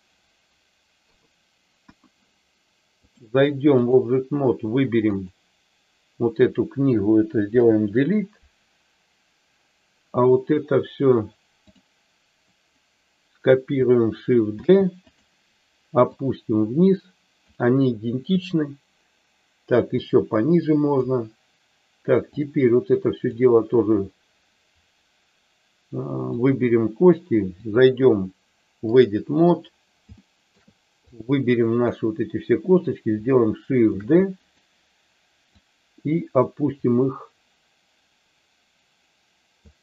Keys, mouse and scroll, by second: 1.0 KP_3, 1.7 KP_1, 3.1 click, 5.0 click, 7.5 Delete, 11.6 click, 14.5 shift+d, 16.1-17.4 drag, 20.0-21.0 drag, 22.4 click, 26.2 click, 27.6-29.1 drag, 30.2 shift+middle click, 31.0 click, 34.0 shift+d, 34.4 click, 35.5-39.6 drag.